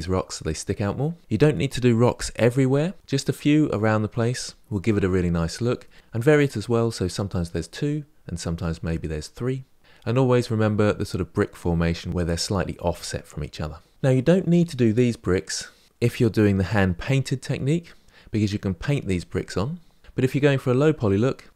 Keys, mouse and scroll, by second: 13.9-14.5 scroll up 1.